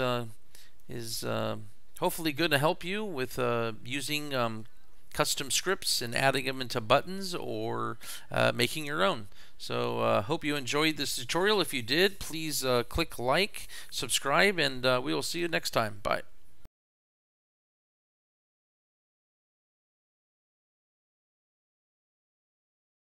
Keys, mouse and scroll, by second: 0.1 middle click, 0.8 middle click.